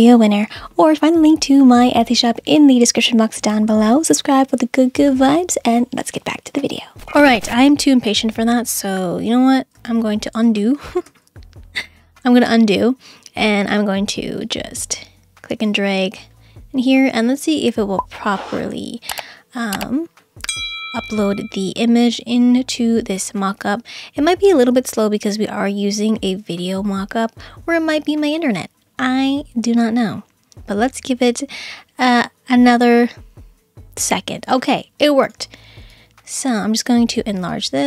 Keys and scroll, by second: 9.3 super+z, 9.8 super+z, 10.4 super+z.